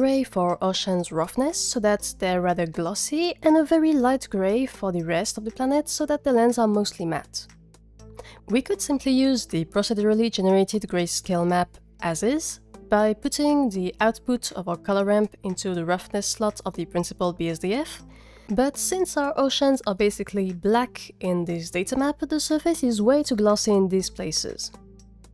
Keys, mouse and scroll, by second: 10.2-12.3 drag.